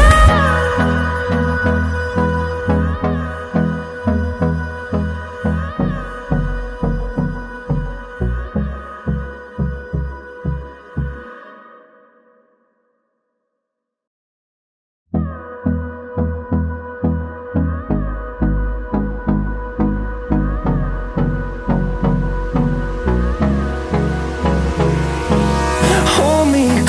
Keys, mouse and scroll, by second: 0.0 middle click, 1.0 click, 1.4 click, 1.9 right click, 3.1 click, 4.4 right click, 5.4 click, 7.2 click, 8.6 middle click, 9.1 middle click, 9.6 middle click, 10.1 middle click, 10.6 middle click, 11.2 click, 12.3-13.6 scroll down 6, 14.0 Escape, 14.7 middle click, 15.0 middle click, 15.4 middle click, 16.0 middle click, 16.5 middle click, 17.1 middle click, 17.5 middle click, 17.9 middle click, 18.3 middle click, 18.7 middle click, 19.1 middle click, 19.8 middle click, 20.2 scroll down 1, 20.8 scroll down 1, 21.0 middle click, 21.4 scroll down 1, 22.0-22.5 scroll up 3, 22.8-23.4 scroll down 4, 23.6-24.6 scroll up 6, 24.7 middle click, 25.1 middle click, 25.4 middle click, 25.6 Escape, 26.4 middle click, 26.6 middle click.